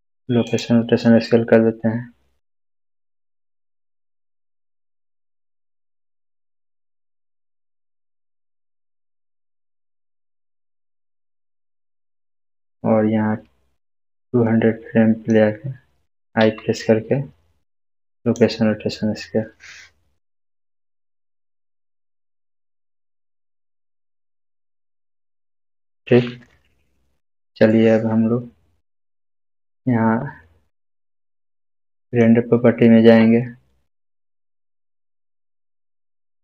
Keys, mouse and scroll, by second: 0.4 click, 5.5 click, 5.5-6.7 scroll down 2, 6.7-8.5 scroll down 1, 8.5-9.9 scroll down 1, 9.9-10.5 scroll down 1, 12.2-15.3 drag, 16.4 i, 18.2 click, 22.4 click, 24.6 right click, 25.3 click, 32.0 click, 32.6 click.